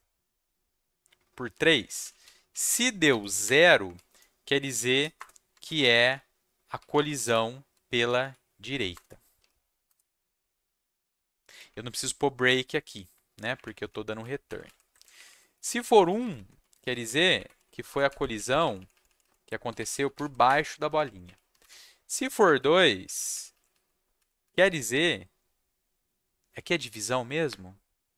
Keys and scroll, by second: 1.7-9.8 typing, 5.1 Return, 5.5 Tab, 8.9 Return, 13.5 shift+Up, 14.2 ctrl+shift+Down, 14.4 ctrl+shift+Down, 14.6 ctrl+shift+Down, 15.0 Up, 15.1 Up, 15.2 Up, 15.6 Right, 15.7 Up, 15.9 Right, 16.0 Right, 16.2 Right, 16.3 Right, 16.7 1, 16.9 Down, 17.0 Down, 17.3 Up, 17.7 Left, 17.8 Left, 18.1 Right, 18.3 shift+Left, 18.5 shift+Left, 18.6 shift+Left, 18.7 shift+Left, 18.9 shift+Left, 19.0 shift+Left, 19.2 shift+Left, 19.4-21.6 typing, 20.8 Down, 21.0 Left, 21.2 Left, 22.1 Down, 22.6 Left, 23.1 shift+Left, 23.3 shift+Left, 23.5 shift+Left, 24.1 Left, 24.4 Left.